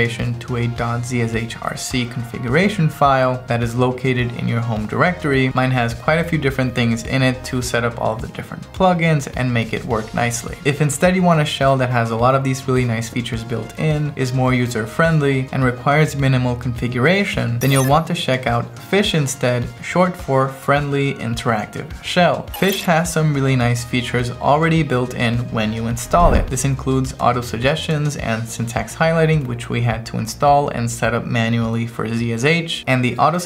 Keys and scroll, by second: 0.1 Return, 3.1 ctrl+e, 3.9 ctrl+e, 4.8 ctrl+e, 5.4 ctrl+e, 6.1 ctrl+e, 7.2 ctrl+e, 7.9 ctrl+e, 8.8 ctrl+e, 9.7 ctrl+e, 10.2 ctrl+e, 26.4 m, 28.0 Right, 28.7-29.8 typing, 30.8-32.0 typing.